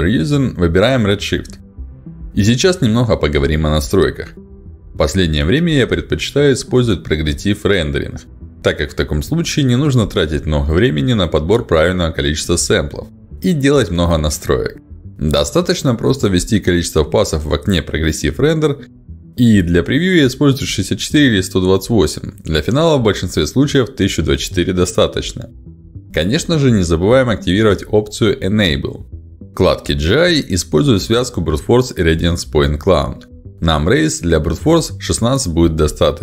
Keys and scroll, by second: 14.5 1, 14.7 2, 14.9 8, 15.2 Return, 20.6 6, 21.4 4, 21.7 Return, 26.6 ctrl+alt+d.